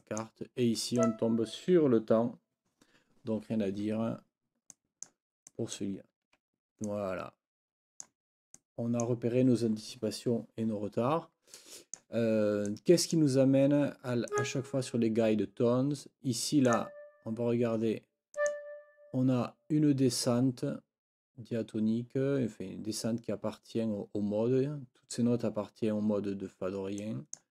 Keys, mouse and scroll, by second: 0.0 click, 0.2 click, 1.2 click, 4.7 click, 5.5 click, 6.8 click, 8.6 click, 8.8 click, 11.6 click, 12.7 click, 14.3 click, 16.7 click, 18.4 click, 27.0 click.